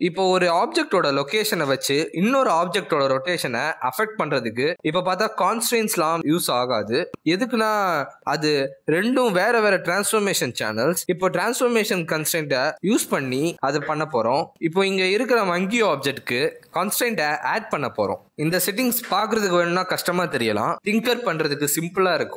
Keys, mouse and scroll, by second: 0.5 click, 1.7 g, 6.2 click, 8.2 click, 9.0 click, 10.7 click, 11.4 g, 14.2 click, 14.7 g, 15.2 shift+a, 16.3 r, 16.9 click, 17.3 click, 20.0 click.